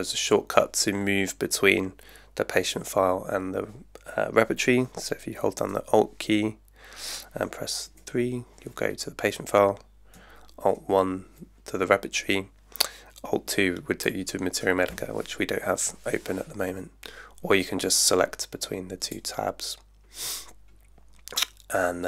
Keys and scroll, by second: 7.9 alt+3, 10.7 alt+1.